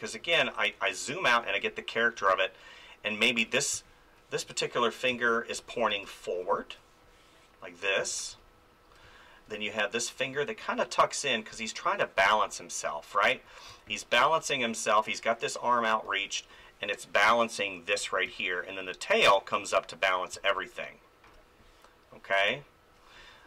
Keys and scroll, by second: 3.7 space, 5.5 ctrl+z, 5.9 space, 8.0 ctrl+z, 8.3 space, 12.2 space, 13.7 space, 16.0 ctrl+z, 17.9 ctrl+z, 18.3 space, 20.0 ctrl+z, 20.3 space.